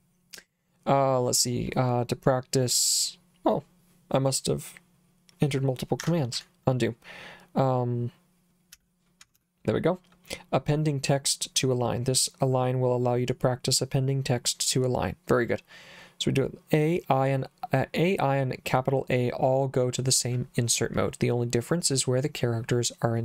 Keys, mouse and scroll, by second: 6.3 u, 8.5-9.9 typing.